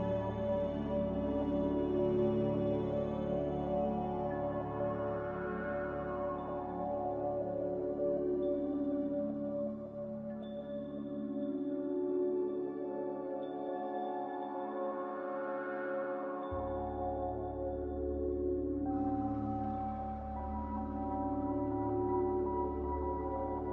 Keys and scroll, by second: 1.2-2.1 typing, 5.3-6.0 typing, 11.2-12.1 typing, 18.6 z, 20.0-20.8 typing.